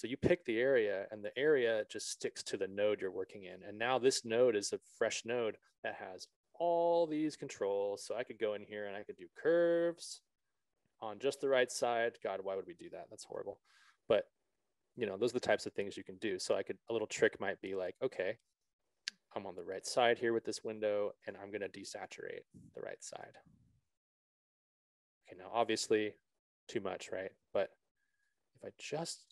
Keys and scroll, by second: 13.6 ctrl+z.